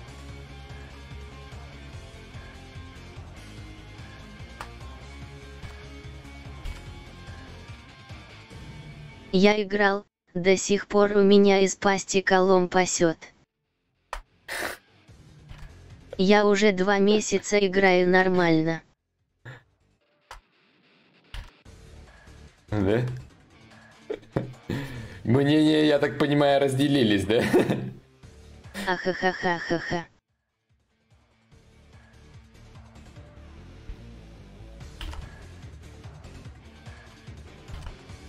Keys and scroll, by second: 2.1 ctrl+z, 2.9 ctrl+z, 3.3 ctrl+z, 3.7 ctrl+z, 5.1 ctrl+z, 6.2 ctrl+z, 7.4 ctrl+z, 11.7 ctrl+z, 13.6 ctrl+z, 15.1 ctrl+z, 19.6-20.4 typing, 34.5 ctrl+y, 34.5 ctrl+z, 37.2 ctrl+z, 38.1 ctrl+z.